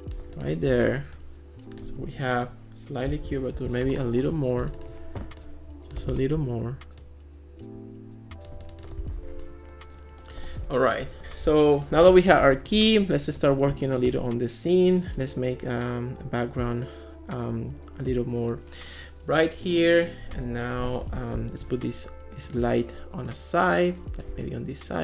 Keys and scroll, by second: 3.6 alt+f, 21.0 alt+p.